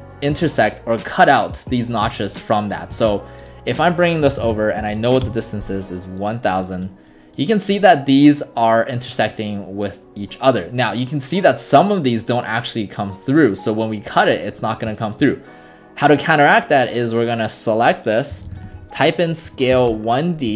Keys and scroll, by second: 4.0-5.4 typing, 18.1-20.0 typing.